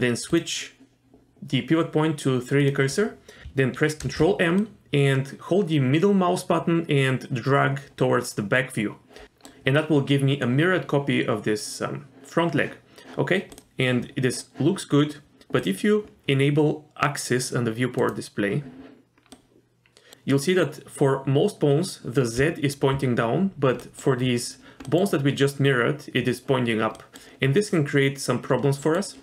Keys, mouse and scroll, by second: 0.3-2.7 drag, 4.0 ctrl+m, 15.6 click, 18.0 click, 19.3 middle click, 22.4 d, 22.9 d, 23.8 middle click, 24.8 middle click, 27.0 middle click, 28.8 middle click.